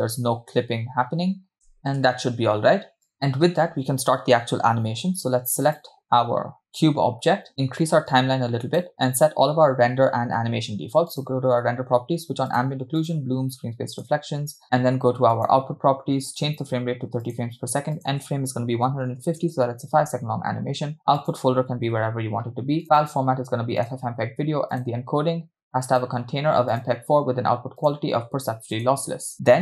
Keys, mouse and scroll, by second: 1.8 s, 1.8 space, 2.1 space, 3.1 click, 5.7 click, 8.1 click, 11.1 click, 12.6 click, 13.1-14.1 drag, 15.3 click, 16.4-17.4 drag, 18.0-19.5 drag, 20.5-21.0 scroll down 2, 21.2-22.8 drag, 22.0 /, 23.0-23.9 drag, 24.2-24.7 scroll down 2, 24.7 click, 25.0-25.9 scroll down 2, 25.9-26.9 drag, 28.2 click, 29.3-29.6 scroll down 2.